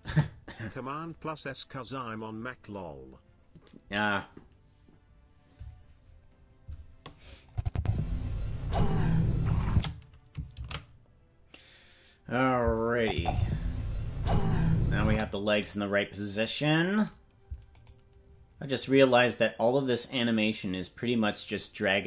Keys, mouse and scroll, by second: 0.0 KP_0, 7.5 click, 7.7 space, 8.4-9.7 scroll up 7, 9.7 space, 12.8 ctrl+s, 13.0-15.1 drag, 13.1 space, 15.0 space, 17.8 right click, 18.9 right click.